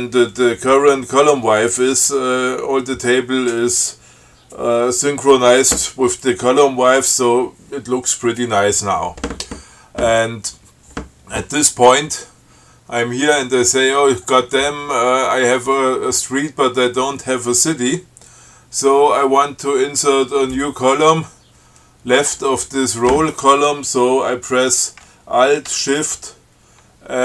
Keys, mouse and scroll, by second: 14.4 click.